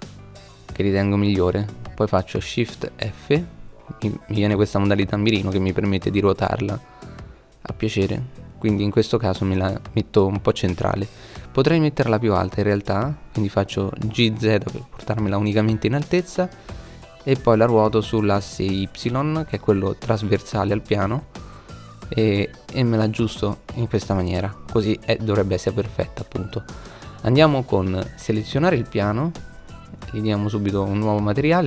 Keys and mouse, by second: 1.9 shift+f, 7.5 click, 10.5 g, 15.6 r, 26.3-27.7 right drag, 27.9 middle click.